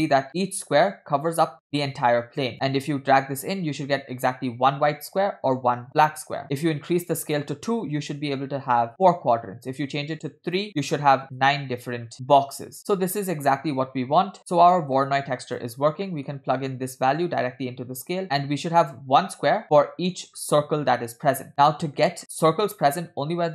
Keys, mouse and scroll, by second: 2.5 click, 5.9 click, 7.0-8.2 shift+drag, 10.1 shift+click, 10.7 shift+click, 13.5-15.6 drag, 16.0 scroll down 1, 16.1 middle click, 17.2-18.2 drag, 18.2-18.6 scroll up 4, 19.6 middle click, 19.6 scroll down 2, 20.6-20.9 scroll up 1, 21.0 middle click, 21.5 middle click, 21.5 scroll down 1.